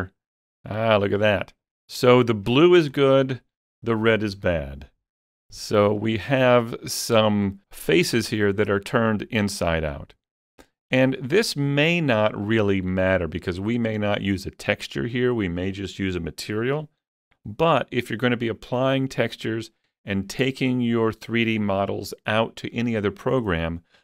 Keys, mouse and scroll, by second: 1.0-2.9 middle drag, 3.0 scroll down 2, 8.1-11.2 middle drag, 10.9-11.2 scroll up 2, 11.6-11.9 scroll up 1, 12.5-16.0 shift+middle drag.